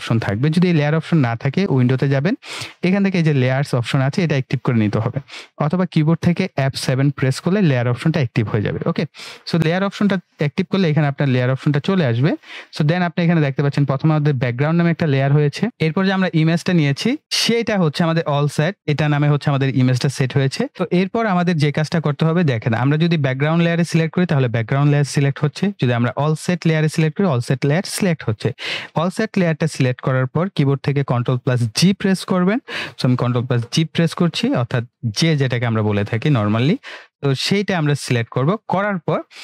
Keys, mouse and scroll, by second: 1.8 click.